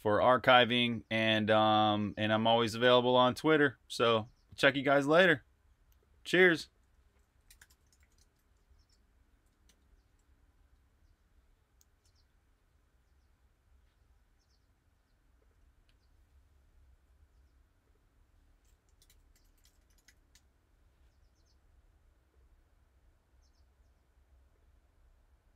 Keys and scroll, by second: 7.5-9.6 typing, 10.6 super+Tab, 18.7-20.5 typing.